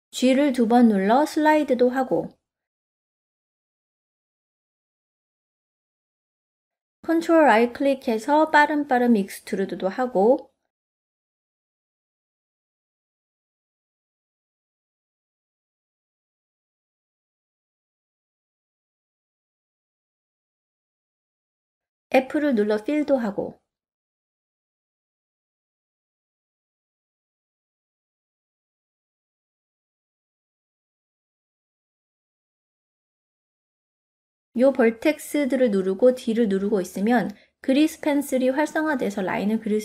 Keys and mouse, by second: 0.2 click, 1.0 g, 5.5 middle click, 8.0 ctrl+right click, 8.9 ctrl+right click, 9.8 ctrl+right click, 10.6 ctrl+right click, 11.4 ctrl+right click, 12.1 ctrl+right click, 12.9 ctrl+right click, 13.8-15.0 middle drag, 16.3 ctrl+r, 17.8 right click, 19.6 click, 21.5 shift+click, 22.9 f, 25.8 click, 26.7 click, 28.1 click, 29.5 click, 30.4-33.4 middle drag, 33.7 shift+middle click, 34.3 ctrl+click, 34.8-36.2 middle drag, 36.6-37.5 d, 37.5-38.8 drag, 38.8 d, 38.9 d.